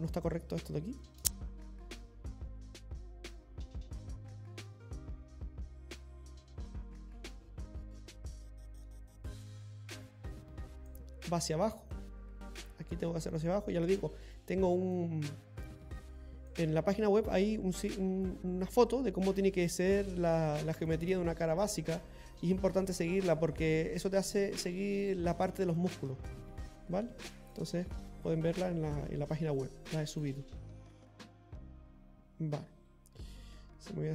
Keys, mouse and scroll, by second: 31.9 middle click, 31.9 scroll up 2, 33.1 scroll up 2.